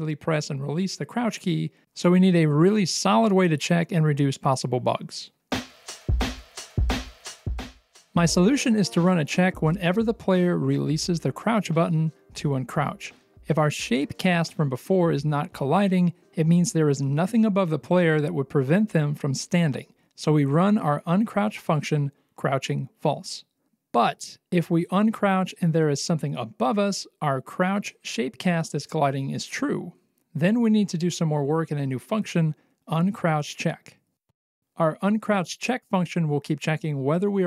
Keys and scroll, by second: 1.2 Escape, 26.0 ctrl+c, 27.3 Return, 27.7 BackSpace, 28.3 ctrl+v, 35.9 ctrl+c, 37.1 Return, 37.2 BackSpace, 37.3 ctrl+v.